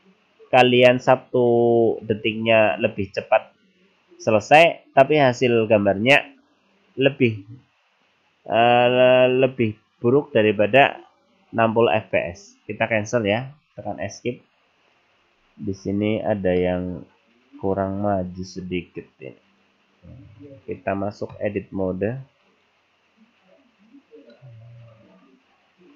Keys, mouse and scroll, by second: 15.2-16.2 scroll up 11, 16.7 middle click, 17.9 right click, 18.9 right click, 19.6 right click, 22.0 Tab, 22.5 right click, 24.4 middle click.